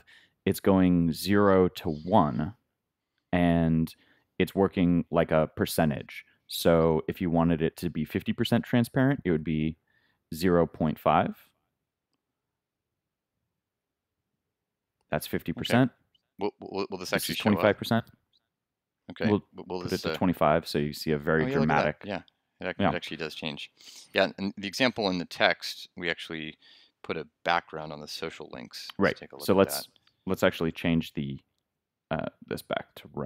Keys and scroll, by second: 19.3 super+s, 20.7 super+r, 23.9 super+Tab, 24.0 super+0.